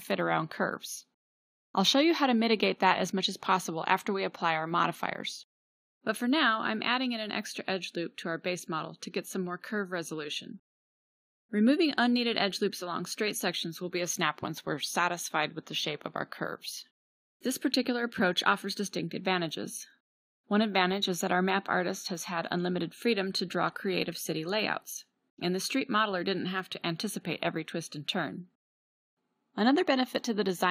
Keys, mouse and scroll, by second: 1.5-3.1 drag, 3.1 Tab, 7.8 click, 8.2 g, 11.1 g, 12.7-13.3 drag, 12.9 g, 18.3-20.2 drag, 18.5 g, 20.5-27.1 drag, 20.5 g, 27.9-30.7 drag.